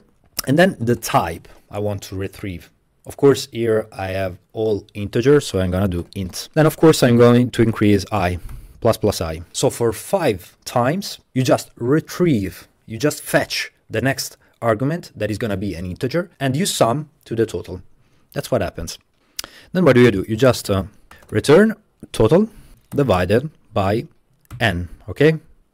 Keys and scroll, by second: 0.0-1.0 typing, 0.2 Tab, 5.7-8.6 typing, 20.1 Return, 20.9-23.2 typing, 24.6 n.